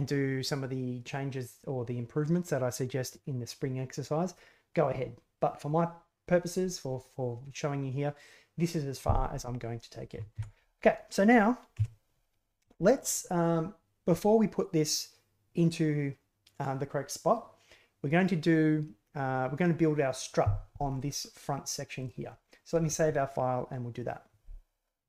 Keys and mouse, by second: 10.3 alt+g, 11.7 KP_1, 12.7 shift+drag, 20.9 middle drag, 22.0 right click, 22.2 middle click.